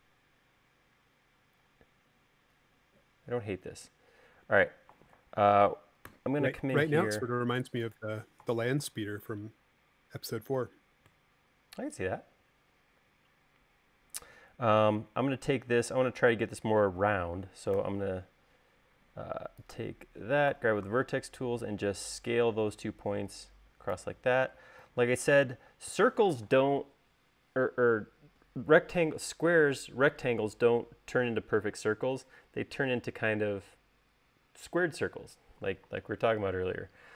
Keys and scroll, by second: 6.2 u, 17.9 s, 19.4 space, 20.6 v.